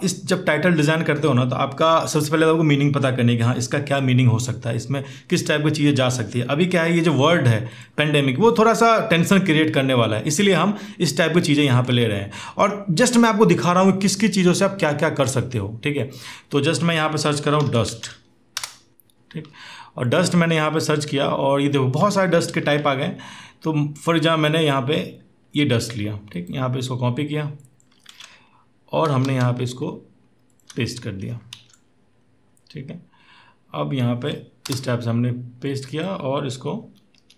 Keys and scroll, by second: 18.4 typing, 27.8 alt+Tab, 29.1 ctrl+v, 31.3 ctrl+t, 34.6 Return, 36.4 Down.